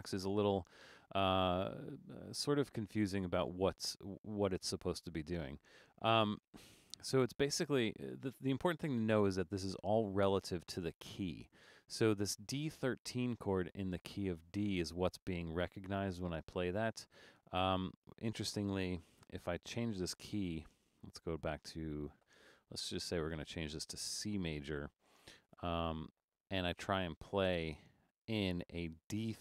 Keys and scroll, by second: 19.1 BackSpace, 20.3 BackSpace.